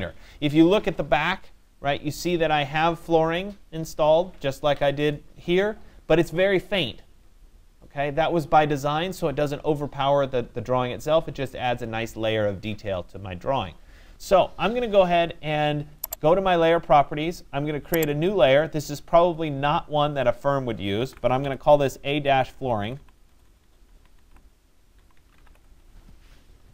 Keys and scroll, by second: 22.8 BackSpace.